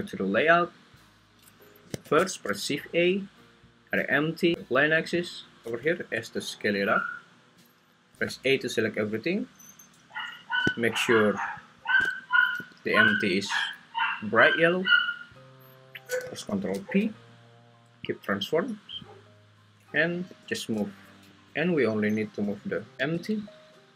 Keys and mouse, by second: 0.0 click, 2.0 shift+a, 6.0 s, 7.6 click, 8.3 a, 12.6 g, 13.1 Escape, 16.5 ctrl+p, 20.3 g, 21.3 Escape, 23.0 g.